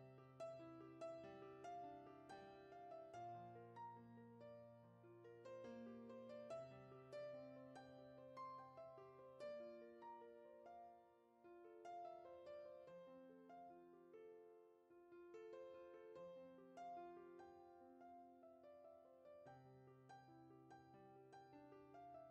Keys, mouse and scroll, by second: 0.4 ctrl+click, 1.2 ctrl+z, 1.5 ctrl+click, 2.3 KP_Decimal, 2.9 scroll down 5, 3.2-5.1 middle drag, 5.1 ctrl+e, 5.9 scroll down 4, 6.1 middle click, 7.9 click, 8.2-8.8 scroll down 3, 8.8-11.1 middle drag, 11.1 click, 11.8 KP_Decimal, 12.3-12.8 scroll down 9, 12.8-13.8 middle drag, 13.8 ctrl+click, 14.7 ctrl+e, 15.7 click, 16.0-16.3 scroll down 3, 16.3 middle click, 17.2-17.7 scroll down 10, 17.9-21.0 middle drag, 21.3 click, 22.1 alt+shift+click.